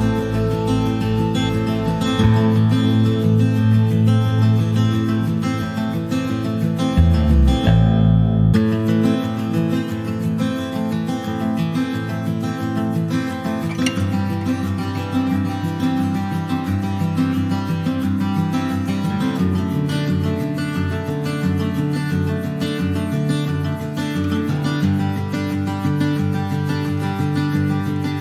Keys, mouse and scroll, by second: 2.5 click, 2.8 scroll down 1, 3.5-4.8 ctrl+shift+right drag, 4.8 scroll up 1, 6.5-9.6 drag, 9.6 scroll up 1, 9.8-12.6 drag, 13.6-14.7 drag, 16.1 click, 16.4-17.0 scroll up 1, 17.0-19.8 drag, 21.2-21.9 scroll down 11, 21.9 middle click, 22.1 scroll up 1, 22.5 shift+middle click, 22.7 shift+scroll up 1, 22.9-24.1 middle drag, 23.1 scroll down 1, 24.5 shift+middle click, 24.7-25.0 scroll up 2, 25.2-28.2 middle drag.